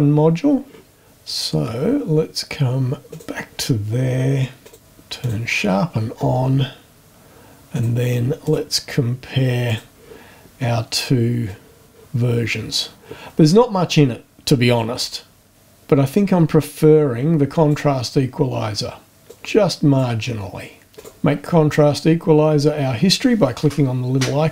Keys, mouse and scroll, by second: 3.1 click, 4.6 click, 5.2 click, 7.7 click, 8.4 click, 9.7 click, 11.5-15.0 drag, 15.5 click, 16.7-17.9 drag, 19.3 click, 20.9 click.